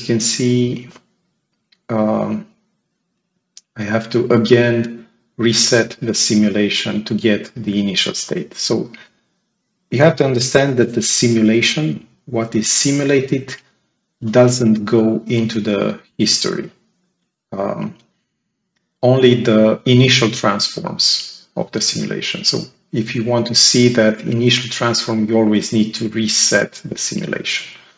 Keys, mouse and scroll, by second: 1.1 click, 5.4 ctrl+click.